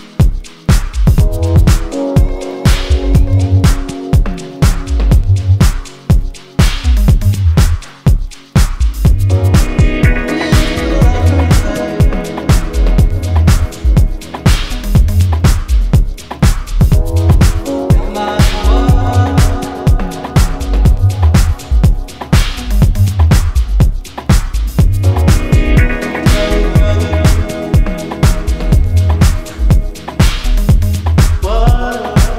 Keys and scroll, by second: 7.2 ctrl+z, 7.7 ctrl+z, 12.4 ctrl+KP_Subtract, 12.5 ctrl+KP_Subtract, 12.6 ctrl+KP_Subtract, 12.7 ctrl+KP_Subtract, 13.4 ctrl+KP_Add, 14.9 KP_Add, 15.1 KP_Subtract, 19.6 ctrl+alt+shift+e.